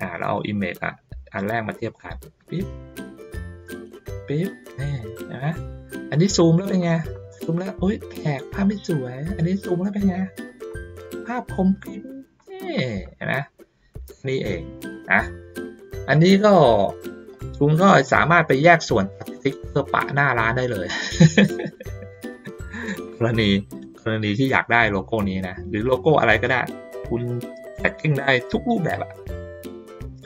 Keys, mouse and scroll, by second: 0.3-1.5 drag, 1.9 ctrl+middle click, 2.7 click, 3.6-4.7 drag, 5.0 middle click, 5.7-6.3 ctrl+scroll up 2, 6.3 ctrl+middle click, 6.6 ctrl+middle click, 7.3 ctrl+middle click, 8.4 ctrl+middle click, 9.0 ctrl+middle click, 9.7 middle click, 11.2 middle click, 13.4 ctrl+middle click, 14.2 ctrl+middle click, 14.9 middle click, 15.6 ctrl+middle click, 18.4 middle click, 19.1 ctrl+scroll down 1, 19.9 middle click, 20.6 ctrl+scroll down 1, 21.2-22.9 drag, 25.1 ctrl+middle click, 25.4 ctrl+middle click, 29.6 ctrl+middle click.